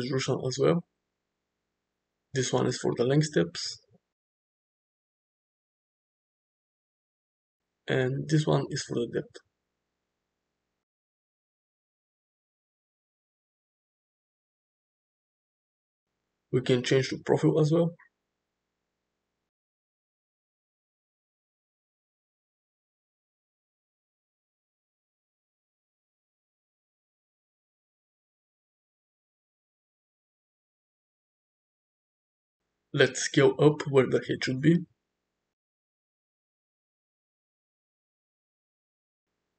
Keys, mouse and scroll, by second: 0.1 drag, 2.4 click, 4.5 click, 8.1-9.3 drag, 9.5-11.2 middle drag, 12.3 middle drag, 13.2-14.9 drag, 15.4-16.6 middle drag, 17.7 click, 18.1-19.3 middle drag, 20.9-21.3 middle drag, 22.3-24.1 drag, 24.6 ctrl+z, 25.8-27.6 middle drag, 28.1 shift+middle click, 28.5-29.9 middle drag, 31.8 shift+middle click, 32.3 Tab, 32.8 click, 33.4 alt+s, 34.8 click, 35.2 alt+s, 37.5 Tab, 37.7 click, 38.4 shift+middle click.